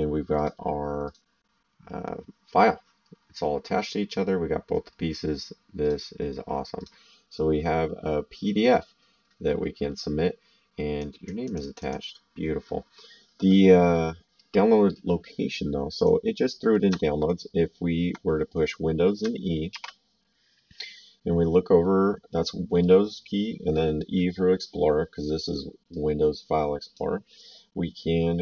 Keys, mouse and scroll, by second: 0.3 click, 5.8 click, 11.0 click, 15.9 click, 19.7 super+e, 25.9 click.